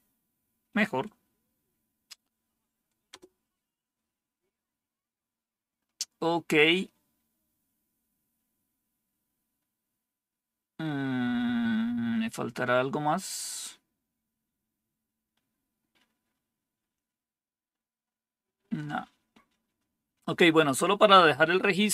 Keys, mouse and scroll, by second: 3.0 Return.